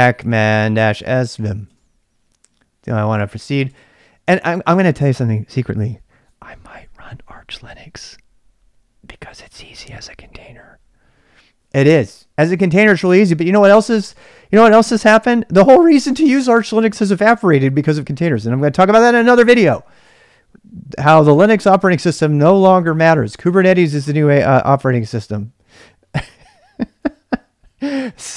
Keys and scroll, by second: 0.0-2.0 typing, 3.2-3.7 typing.